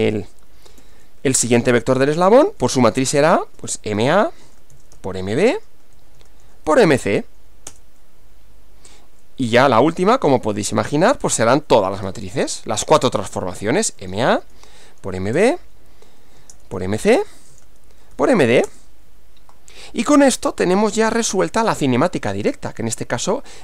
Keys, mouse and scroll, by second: 0.0-6.8 typing, 7.7 Return, 9.6-18.1 typing, 18.7 Return, 21.8-23.6 middle drag.